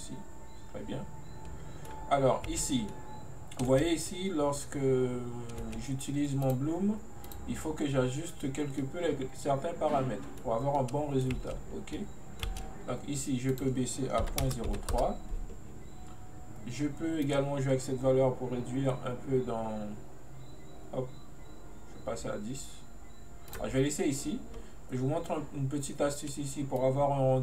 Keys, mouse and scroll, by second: 2.6 space, 3.0-3.7 middle drag, 3.7 space, 4.2-5.7 middle drag, 5.7 space, 6.5 click, 7.3-8.9 drag, 8.9-11.4 middle drag, 11.4 space, 12.1 middle click, 12.5 space, 13.5-16.6 drag, 17.3-20.3 drag, 26.9 click.